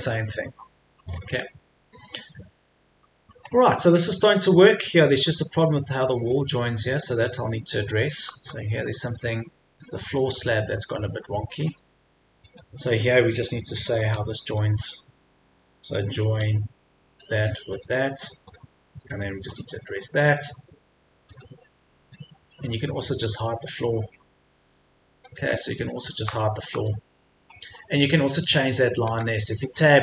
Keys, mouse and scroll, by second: 0.6 middle click, 1.1-1.6 scroll up 1, 1.8-2.3 scroll down 1, 3.0 middle click, 3.4-3.9 scroll up 1, 3.9 click, 4.3 scroll up 1, 5.1 middle click, 6.2 click, 7.6-8.3 scroll up 1, 8.3 Escape, 9.2 click, 10.0-10.3 scroll down 1, 10.7 middle click, 11.6 scroll up 1, 11.9 Escape, 12.5 click, 13.0 Escape, 14.1 f, 17.2 click, 18.3 Escape, 19.1 click, 21.5-22.1 scroll up 1, 22.1-24.1 drag, 24.1-24.8 scroll down 2, 24.3 Escape, 24.8 Escape, 25.3 click, 26.1 Escape, 26.2-26.5 scroll down 1, 26.7 Escape, 27.1-27.5 scroll up 1, 29.1 Tab, 29.5-30.0 drag.